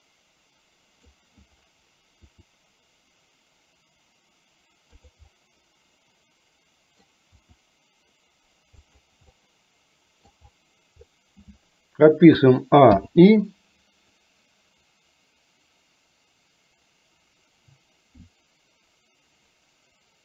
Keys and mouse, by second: 2.2 r, 5.4-7.0 middle drag, 7.5 r, 9.4 middle click, 13.0 i, 14.2-20.2 drag.